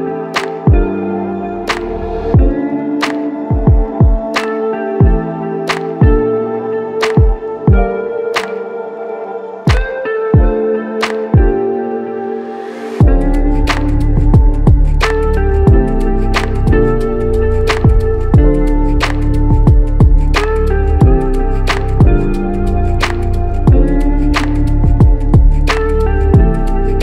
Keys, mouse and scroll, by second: 3.0 ctrl+click, 10.0 alt+click, 11.5 alt+click, 13.9 ctrl+click.